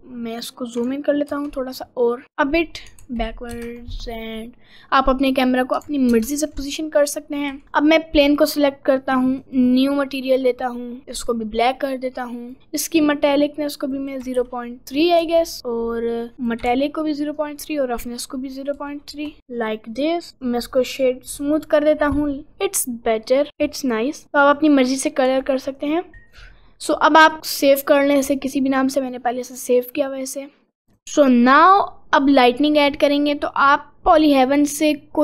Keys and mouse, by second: 1.3 ctrl+alt+n, 2.2 middle click, 3.5 ctrl+alt+n, 4.4-5.6 middle drag, 7.6 g, 9.7 click, 10.3 click, 13.2-14.5 drag, 15.6-18.5 drag, 20.4 right click, 23.5 click, 24.5 click, 25.3 g, 26.1 ctrl+s, 32.2 click, 35.0 click.